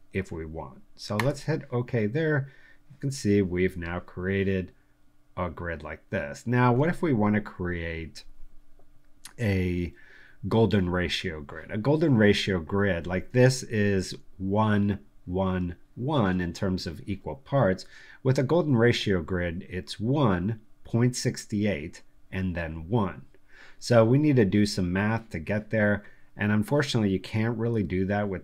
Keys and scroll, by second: 13.2 space.